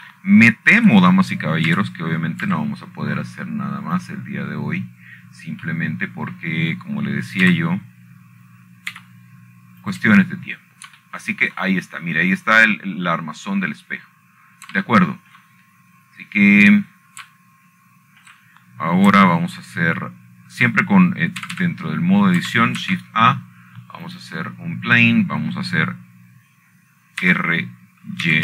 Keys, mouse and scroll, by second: 0.2 middle click, 1.2 shift+middle click, 2.2-2.8 scroll up 2, 2.8-4.4 shift+middle drag, 4.4 g, 5.2 z, 6.7 click, 7.5-8.4 scroll up 2, 9.1 middle click, 10.2 g, 11.6 y, 12.5 click, 13.0-14.2 scroll down 7, 14.2 shift+middle click, 16.4 middle click, 16.7-17.2 scroll up 1, 18.1-19.2 shift+middle drag, 18.3 scroll up 2, 19.2-21.0 scroll down 3, 21.0 shift+middle click, 24.3 typing, 25.6 typing, 26.8 click.